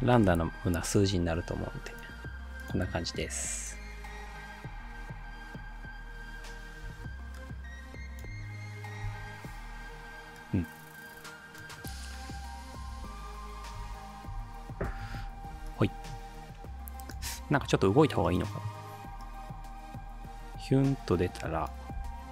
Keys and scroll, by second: 0.0-0.5 typing, 4.9 space, 6.9 space, 8.3 space, 12.9 space, 13.8 space, 14.4 space, 22.0 p.